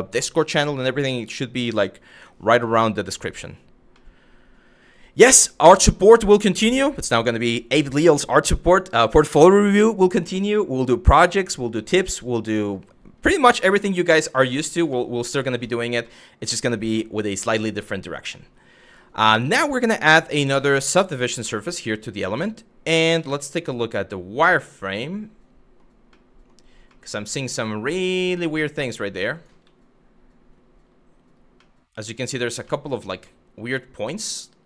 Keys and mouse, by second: 3.7-4.9 middle drag, 13.9 middle drag, 14.6 shift+middle drag, 15.0 middle drag, 15.8-16.2 middle drag, 16.7 middle click, 19.1-20.6 drag, 21.0-21.9 middle drag, 22.9 z, 24.2-25.4 middle drag, 25.8-26.1 middle drag, 26.6-27.1 middle drag, 27.5 z, 28.9 click, 29.3 z, 31.3-32.0 middle drag, 32.4 shift+middle drag, 33.0 middle drag, 33.8-34.6 middle drag.